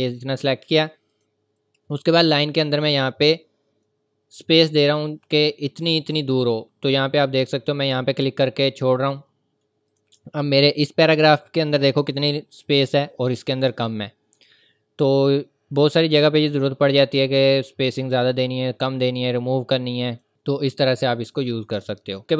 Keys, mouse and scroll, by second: 8.8 click, 10.2 scroll down 1, 12.9 scroll down 1, 14.0 scroll up 1, 15.1 click, 20.1 click.